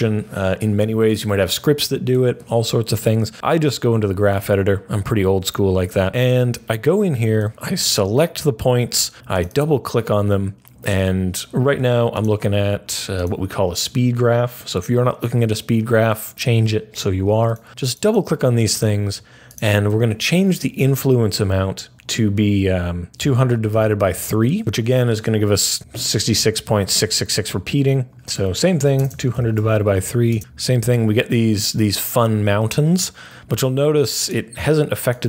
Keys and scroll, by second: 25.7 typing, 28.5-30.0 typing, 31.5 typing.